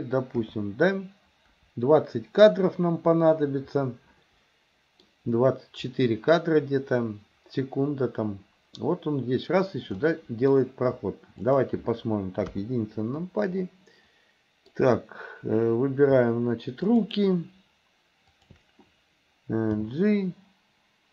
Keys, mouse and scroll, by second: 3.8-5.1 middle drag, 10.1 middle click, 11.5 click, 12.5 KP_1, 13.7-14.8 middle drag, 18.4 shift+click, 19.8 g.